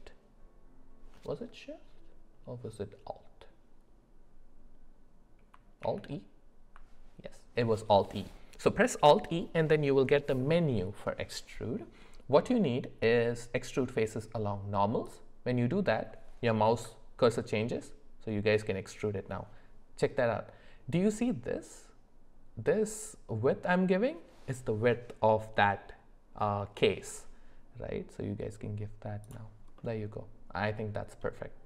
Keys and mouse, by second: 5.8 alt+e, 29.8-31.1 middle drag.